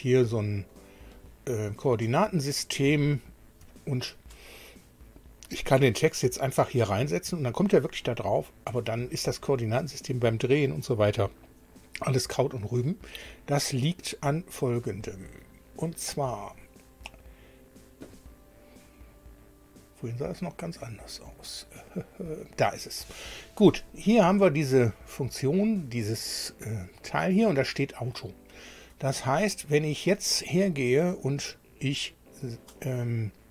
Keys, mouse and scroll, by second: 0.8 middle click, 2.2 shift+middle click, 3.0 shift+middle click.